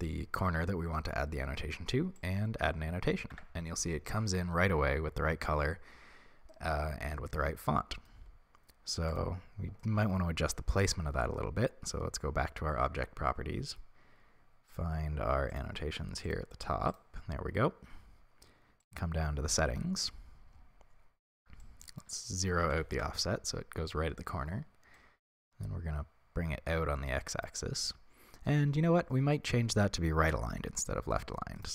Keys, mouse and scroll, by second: 2.4-3.0 drag, 3.4 Tab, 6.6-18.8 middle drag, 10.8-15.4 scroll down 1, 18.8 click, 23.0-31.7 shift+drag, 23.1 Return.